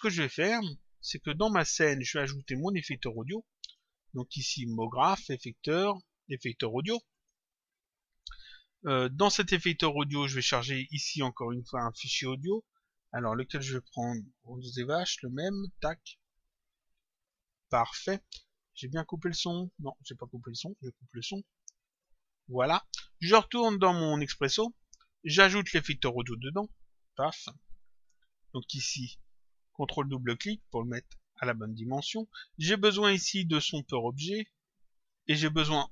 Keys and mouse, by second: 0.2 click, 2.4 click, 3.6 click, 4.6 click, 7.0 click, 9.1 click, 12.9 click, 15.3 click, 19.0 click, 21.9 click, 23.9 click, 25.6 click, 27.6 click, 30.0 ctrl+click, 33.4 click, 34.9 click.